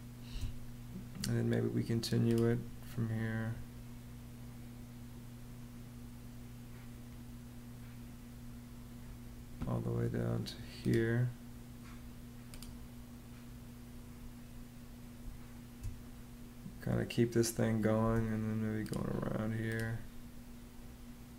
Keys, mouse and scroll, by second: 0.1 space, 15.0 space, 17.8 space.